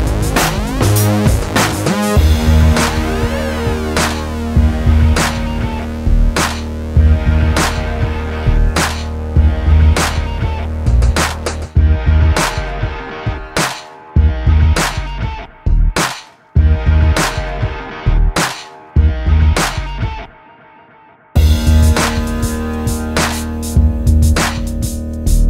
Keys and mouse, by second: 0.7 s, 1.4 middle click, 2.0 ctrl+2, 2.8 KP_7, 3.1 KP_1, 3.6 Tab, 4.4 middle click, 4.9 middle click, 5.2 Tab, 5.3 middle click, 5.5 middle click, 6.1-8.2 typing, 8.0 middle click, 9.3 a, 11.0 alt+o, 11.3 s, 12.3 KP_1, 12.9 middle click, 14.0 ctrl+Tab, 16.9 click, 17.5 click, 17.9 click, 18.2 a, 20.3 Escape, 20.9 right click, 21.5 right click, 22.2 click, 22.7 click, 24.1 middle click, 24.5 KP_7.